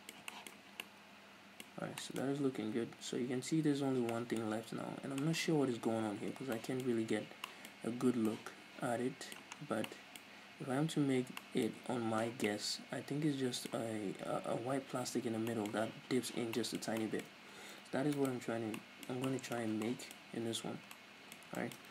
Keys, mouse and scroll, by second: 0.7 scroll down 2, 1.8 scroll up 1, 2.4 scroll up 1, 4.2 middle click, 4.6 scroll down 1, 4.9-5.3 scroll up 1, 5.3 middle click, 5.5 scroll up 1, 6.1 scroll down 1, 6.9-9.1 middle drag, 7.2 scroll up 1, 7.8 scroll up 1, 9.6-11.3 middle drag, 9.6-9.9 scroll down 2, 10.5-11.3 scroll up 2, 11.3 scroll down 1, 12.6-14.0 middle drag, 13.9 scroll up 2, 15.3-18.2 middle drag, 15.3-15.6 scroll down 2, 17.4-18.2 scroll up 2, 18.2 right click, 18.4 Tab, 18.9-21.9 middle drag, 20.4 scroll up 1.